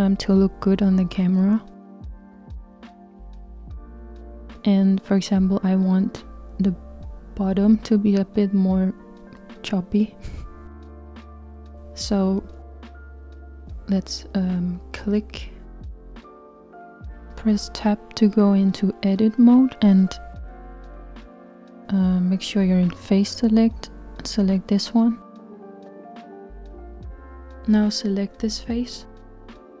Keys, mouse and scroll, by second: 3.1-4.0 scroll up 1, 4.0-7.0 scroll up 1, 12.7 click, 17.9 Tab, 27.6-29.8 drag.